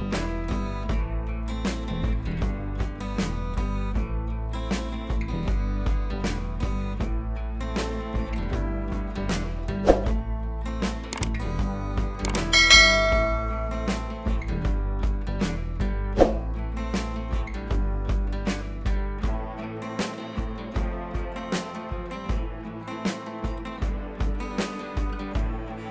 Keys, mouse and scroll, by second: 0.4 [, 0.6 [, 0.8 [, 0.9-3.0 drag, 3.0 [, 3.2 click, 3.9 ctrl+z, 4.6 click, 5.3 click, 7.8 click, 9.8 ctrl+z, 10.8 v, 11.0-13.0 drag, 13.0 right click, 13.6 click, 14.4 ctrl+t, 14.6 scroll down 1, 15.4-16.8 alt+drag, 16.8-18.8 alt+drag, 18.8-20.2 alt+drag, 20.4 click, 21.6-24.4 alt+drag, 24.4 ctrl+t, 25.2-25.9 alt+drag.